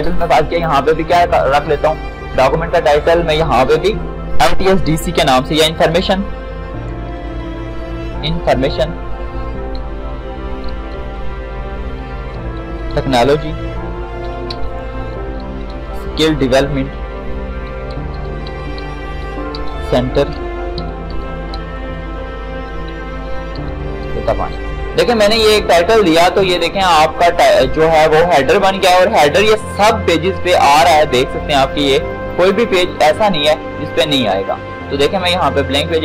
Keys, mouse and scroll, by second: 5.4-8.0 typing, 9.8-24.3 typing, 25.3-25.9 scroll down 1, 25.9 click, 31.3 click.